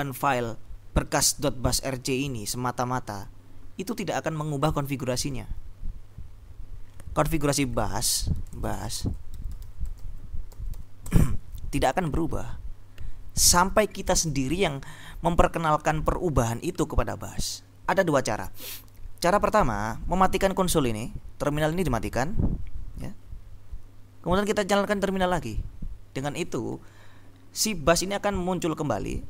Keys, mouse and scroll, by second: 7.9 click, 8.2-11.3 typing.